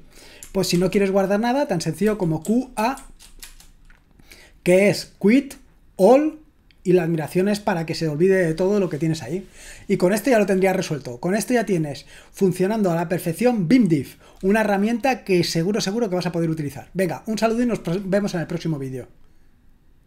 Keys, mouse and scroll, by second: 2.0-3.4 typing.